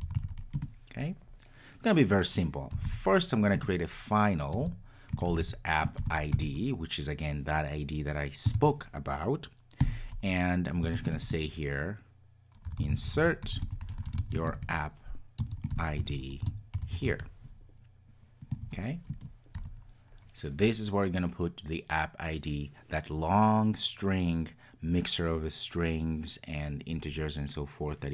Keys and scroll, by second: 3.6 Return.